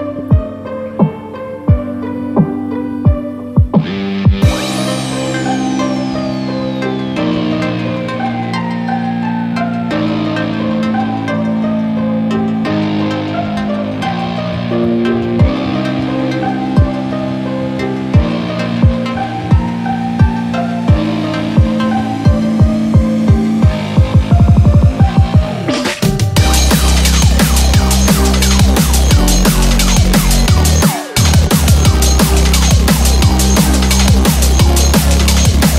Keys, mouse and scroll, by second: 0.1 click, 0.4 g, 1.1 click, 1.2 shift+middle click, 1.2 scroll down 3, 1.2 g, 1.4 scroll up 1, 1.6 g, 2.5 shift+middle click, 2.6 click, 2.6 scroll up 1, 2.6 g, 2.7 g, 3.5 scroll up 1, 3.7-4.5 scroll, 5.6 shift+middle click, 5.6 scroll down 8, 5.6 3, 5.7 click, 6.2 click, 6.6 scroll down 1, 6.8 middle click, 8.3 click, 8.6 scroll up 1, 8.8 middle click, 9.9 e, 22.6 click, 23.1-24.2 scroll down 2, 24.2 click, 25.9 middle click, 28.2 scroll up 4, 28.9 middle click, 31.5 scroll down 1, 32.6-34.1 scroll down 6, 34.1 click, 34.4 scroll down 2, 34.6 middle click, 35.6 scroll up 2.